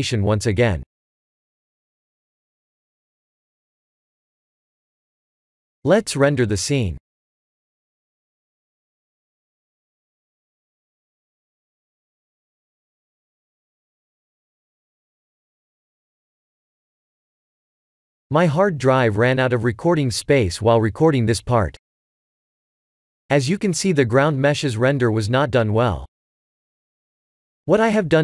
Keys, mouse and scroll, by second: 0.8 click, 4.1 click, 4.3 click, 4.9 click, 5.0 click, 5.2 ctrl+s.